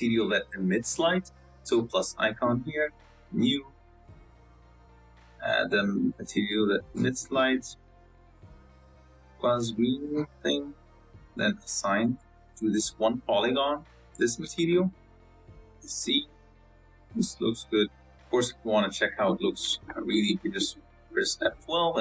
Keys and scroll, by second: 14.3 Tab, 15.1 Tab, 15.4 Tab, 15.8 z, 20.1 z.